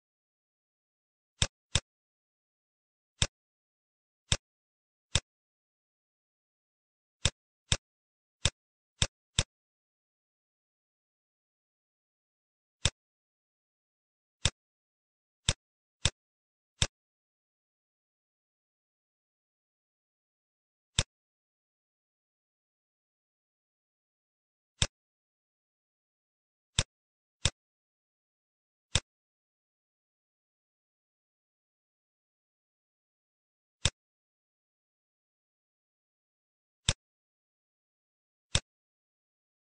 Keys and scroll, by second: 2.1 space, 3.9 ctrl+d, 17.6 Page_Down, 23.3 Page_Down, 27.9 space, 31.4 ctrl+shift+f, 35.4 ctrl+z, 37.6 Home.